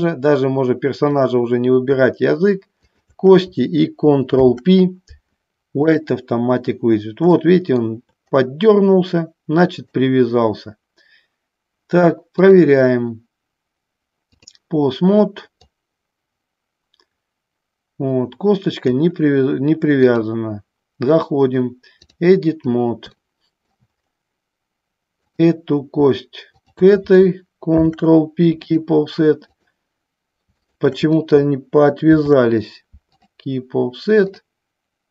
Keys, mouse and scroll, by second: 3.0 shift+click, 4.5 ctrl+p, 7.5 shift+middle click, 9.9 click, 12.6-14.7 drag, 15.9-19.1 drag, 20.2-22.4 drag, 23.3 shift+middle click, 25.2 click, 26.7 shift+click, 28.0 ctrl+p, 30.6 shift+click, 32.3 ctrl+p.